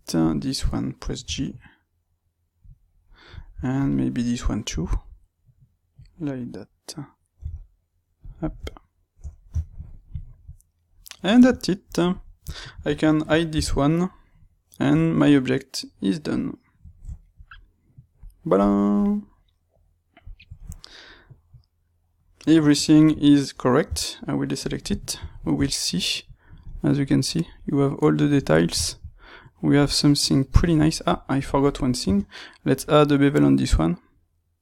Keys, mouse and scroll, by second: 0.1 click, 1.3 g, 2.7 click, 3.3 shift+middle click, 3.7 click, 4.6 g, 6.1 click, 7.4 g, 8.3 click, 8.5 Tab, 9.6-12.0 ctrl+middle drag, 12.0 click, 12.4-18.5 shift+middle drag, 13.5 h, 18.5 click, 23.8 a, 24.9-31.3 ctrl+middle drag, 31.3 click, 31.9 space.